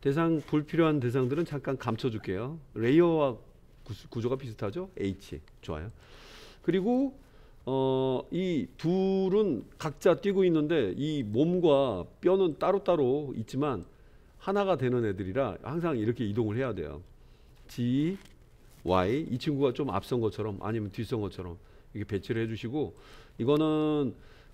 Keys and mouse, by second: 4.9 h, 5.9 click, 11.2 click, 12.6 click, 13.9-14.5 drag, 16.4-17.1 middle drag, 17.5 g, 23.1 click, 23.4-24.5 middle drag.